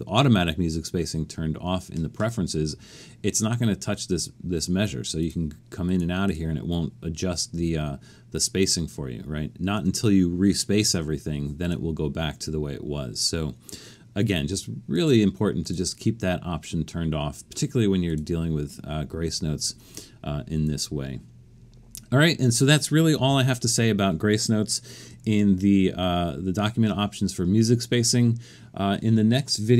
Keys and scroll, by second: 9.2 Escape, 9.7 super+a, 10.8 4, 23.3 super+1, 25.2 alt+super+a.